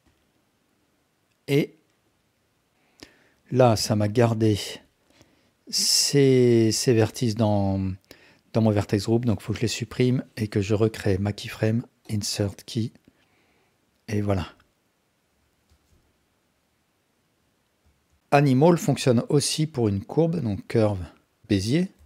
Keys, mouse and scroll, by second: 0.1-2.7 drag, 3.0-4.8 drag, 9.0-11.2 ctrl+drag, 12.1 click, 13.1-15.6 drag, 15.7 space, 17.8 space, 18.2 x, 19.5 shift+a.